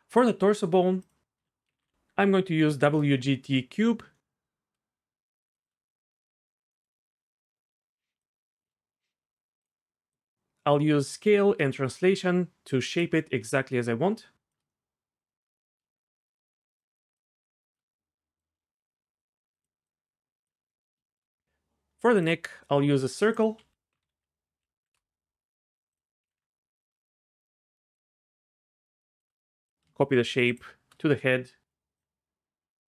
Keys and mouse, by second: 1.1-2.9 drag, 5.2 shift+click, 6.7 middle click, 8.2 shift+click, 9.4 shift+click, 10.2 shift+click, 12.3 shift+click, 13.6 shift+click, 16.3 shift+click, 17.1 shift+click, 19.2 shift+click, 19.8 shift+click, 21.4 ctrl+z, 23.0 click, 23.3-24.9 drag, 24.6 Down, 26.0 click, 27.5 shift+click, 28.4 shift+click, 31.7 click.